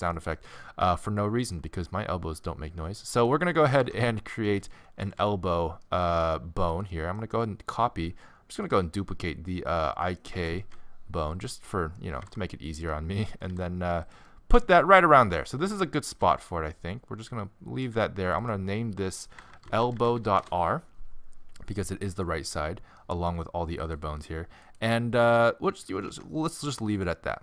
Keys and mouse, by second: 0.1-1.8 middle drag, 3.8 Tab, 4.5 z, 5.0 a, 5.2 a, 6.7 middle click, 7.8-10.4 middle drag, 10.4 shift+d, 12.1 g, 13.4 g, 14.4 middle click, 15.6 g, 18.4 click, 21.8-24.1 middle drag, 26.1 Tab, 26.9-27.4 middle drag.